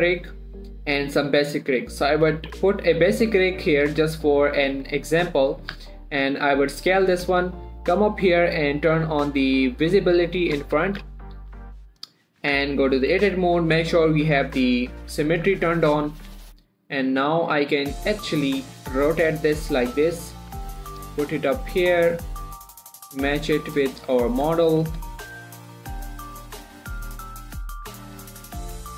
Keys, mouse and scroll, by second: 2.6 click, 3.0-3.6 scroll down 1, 3.6 1, 3.9-4.3 scroll up 1, 4.3 s, 6.0 click, 6.1 z, 6.5-7.8 scroll up 1, 7.8 z, 9.0-9.4 scroll down 1, 9.4 click, 11.2 shift+middle click, 11.3 z, 11.8 s, 12.3 click, 12.9 Tab, 13.4 click, 15.2 shift+click, 15.5 shift+middle click, 15.7 scroll up 1, 16.4 shift+right click, 16.8 r, 17.2 right click, 18.2 click, 19.1 r, 20.0 click, 20.8 g, 21.3 click, 21.8 shift+middle click, 22.2 click, 22.4 g, 23.1 click, 23.6 g, 24.1 click, 24.4 shift+middle click, 25.1 3, 25.5 click, 25.9 g, 26.9 click, 27.5 g, 28.0 click, 28.3 scroll down 2, 28.8 1.